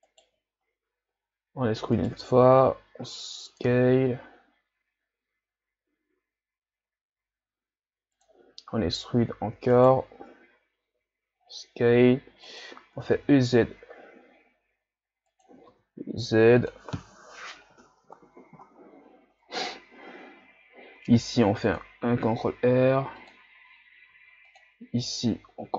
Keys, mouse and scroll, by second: 0.1 alt+right click, 1.6 e, 8.5 z, 9.4 e, 15.5 e, 16.9 z, 18.6 Tab, 19.5 Tab, 21.0 ctrl+r, 24.1 ctrl+r.